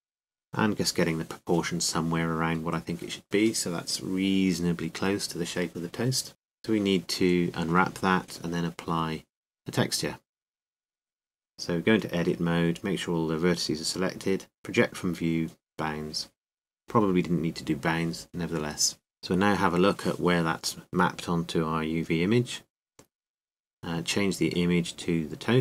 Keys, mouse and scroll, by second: 3.2 KP_7, 9.6 Tab, 10.5 a, 11.0 a, 12.3 click, 19.1 n.